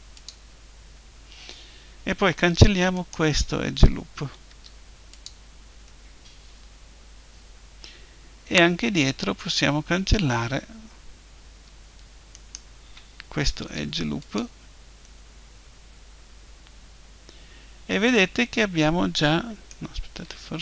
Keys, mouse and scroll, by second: 2.9-4.8 right drag, 4.5 Delete, 4.8-6.0 middle drag, 12.3-14.1 right drag, 13.6 Delete, 14.1 middle click, 15.1 click.